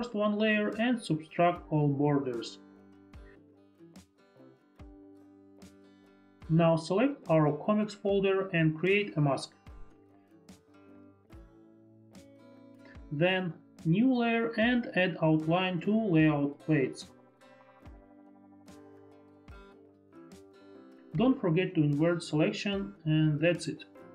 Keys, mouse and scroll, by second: 0.0 Delete, 1.7 ctrl+click, 6.8 ctrl+alt+click, 8.1 ctrl+alt+click, 8.9 click, 9.4 click, 11.3 click, 13.7 click, 14.3 F4, 15.1 click, 19.5 click, 23.5 click.